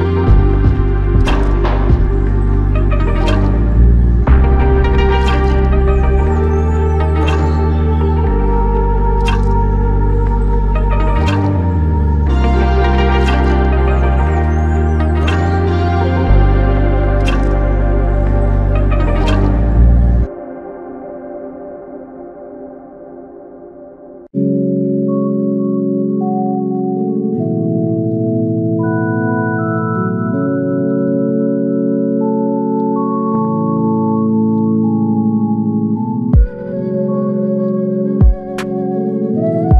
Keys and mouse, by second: 4.2 ctrl+click, 6.8 q, 8.8 double click, 16.6 double click, 27.5 double click, 32.0 space, 36.1 double click.